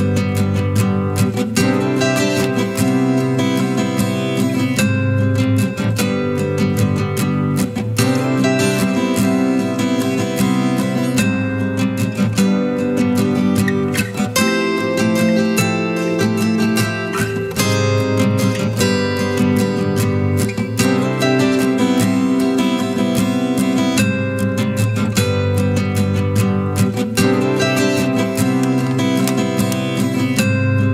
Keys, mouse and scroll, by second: 0.5 right click, 21.4 ctrl+-, 27.2 double click.